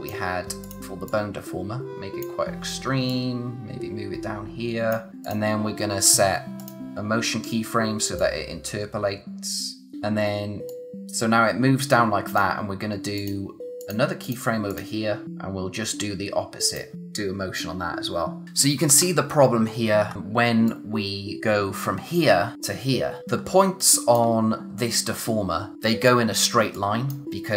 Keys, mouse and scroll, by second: 18.7 scroll down 1, 19.0-19.7 scroll up 1, 19.7-20.1 scroll down 1, 20.1 scroll up 1, 20.6 click, 23.2 scroll up 1, 23.4 scroll down 1, 23.6 space, 23.8 click, 24.0 space, 26.7 click.